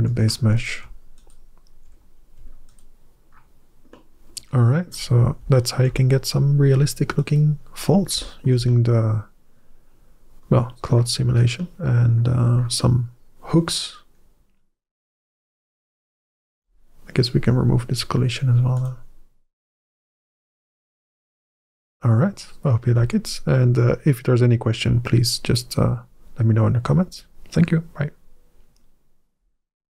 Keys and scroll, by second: 2.6 ctrl+alt+a, 21.4 alt+a.